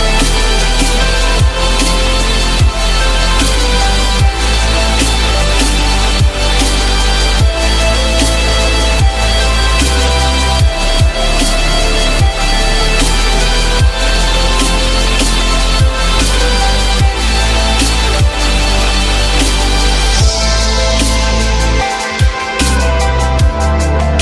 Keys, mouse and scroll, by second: 4.1 F3, 5.0 alt+middle click, 7.3 4, 7.5 Return, 11.1 F3, 11.8 F3, 14.7 alt+middle click, 15.3 alt+middle click, 16.8 alt+middle click, 20.8 F4.